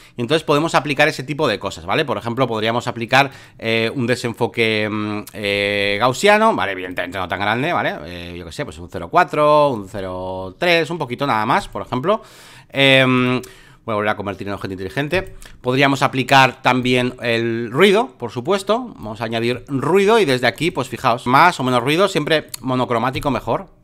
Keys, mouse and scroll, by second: 2.2-5.4 drag, 6.9-10.5 drag, 11.6-13.2 drag, 13.2-15.1 right drag, 15.1-23.8 drag.